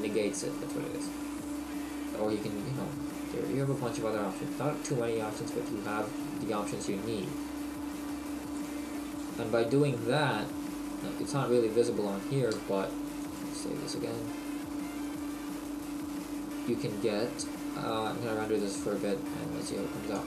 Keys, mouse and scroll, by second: 7.3 middle click, 10.3 middle click, 11.0 middle click, 13.6 ctrl+s, 15.1 click, 18.5 click, 20.2 click.